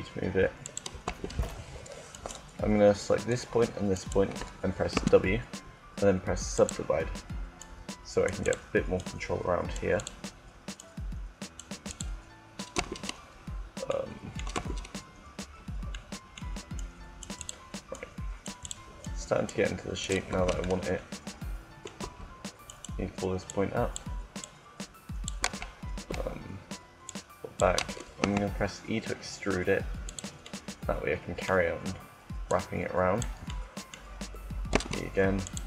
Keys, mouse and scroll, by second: 0.4-1.9 drag, 0.9 Tab, 2.1 click, 2.5 right click, 2.8 Tab, 4.6 w, 7.3 right click, 9.5-12.3 right drag, 12.6 Tab, 14.3 Tab, 16.6 click, 17.1-20.3 right drag, 20.2 Tab, 21.9 Tab, 23.5 click, 25.3 Tab, 26.0 Tab, 27.9 e, 30.1-31.8 drag, 31.8 middle click, 32.2-34.1 drag, 34.1 middle click, 34.3 e, 35.3-35.6 drag.